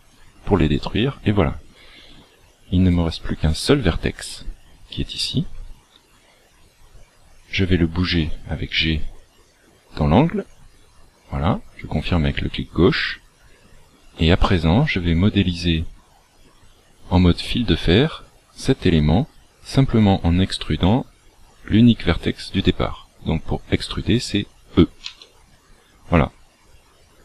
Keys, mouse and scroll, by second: 2.8 right click, 7.4 g, 14.4 shift+middle click, 25.0 e.